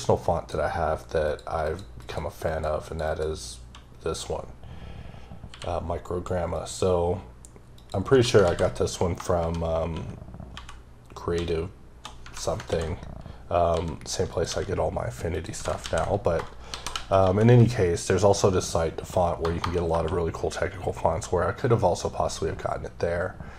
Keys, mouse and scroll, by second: 1.6 click, 2.0 click, 2.5 click, 2.8 click, 3.0 double click, 5.5 q, 6.5 click, 7.7 click, 8.1 Tab, 14.3 click, 14.5 g, 15.3 click, 15.5 Tab.